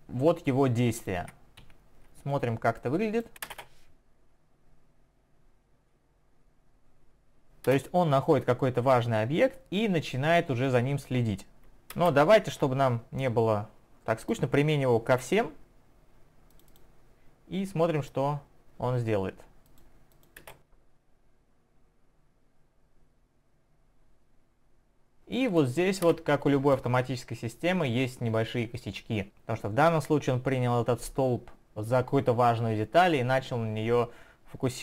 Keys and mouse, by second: 1.6 Escape, 2.8 click, 3.5 click, 3.6 space, 7.7 Up, 7.7 space, 12.0 space, 13.2 click, 16.6 click, 16.8 double click, 19.7 click, 20.2 click, 20.3 double click, 20.5 space, 26.1 space.